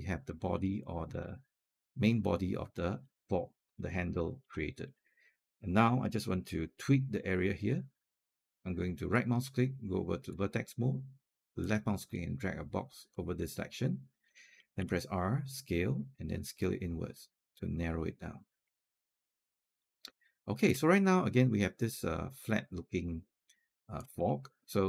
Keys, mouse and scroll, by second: 0.6 alt+click, 2.6 alt+click, 4.4 alt+middle click, 8.2 alt+click, 8.9-11.4 right drag, 11.4-13.9 drag, 14.6 r, 16.2-18.5 drag, 18.7-20.5 alt+drag, 20.7-23.8 alt+drag, 24.1 alt+middle click, 24.6 alt+click.